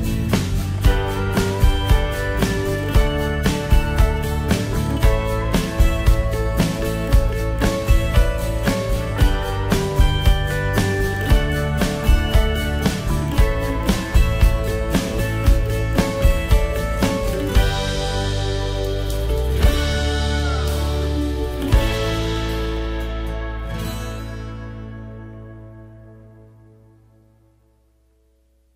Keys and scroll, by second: 27.7 ctrl+j.